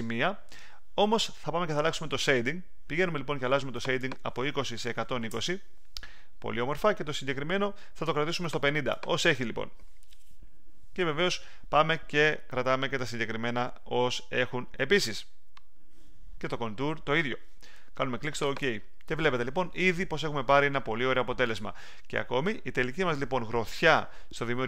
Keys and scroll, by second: 4.6-5.7 typing.